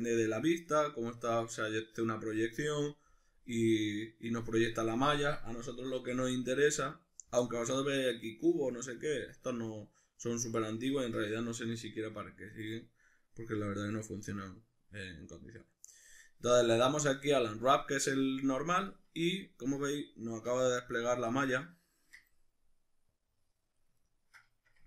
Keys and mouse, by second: 6.1 u, 19.0-23.1 middle drag, 20.5 a, 23.1-24.1 drag, 24.1-24.8 ctrl+middle drag.